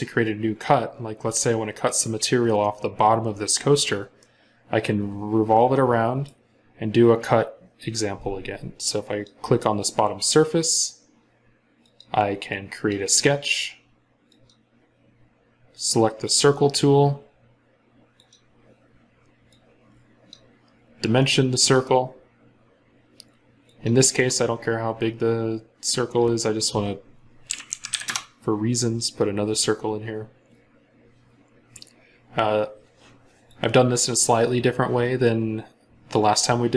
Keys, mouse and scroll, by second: 4.0 middle click, 27.3-27.9 typing, 27.9 Return.